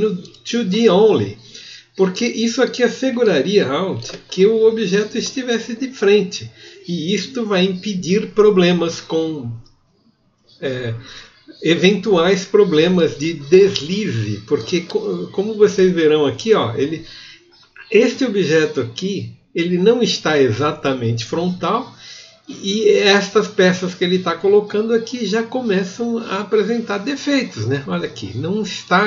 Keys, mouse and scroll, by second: 15.8 click.